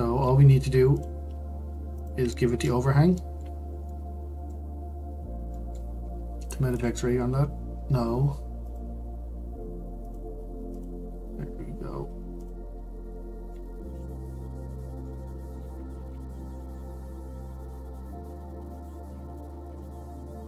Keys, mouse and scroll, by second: 1.9 shift+click, 2.3-3.5 middle drag, 3.5-3.9 scroll up 1, 3.9-6.8 middle drag, 6.8 click, 7.2-8.6 scroll up 1, 8.6-10.1 drag, 10.7 click, 12.4-13.5 drag, 13.5-15.9 middle drag, 15.9 g, 19.1 scroll up 1, 19.2-19.8 scroll down 3, 19.8 middle click.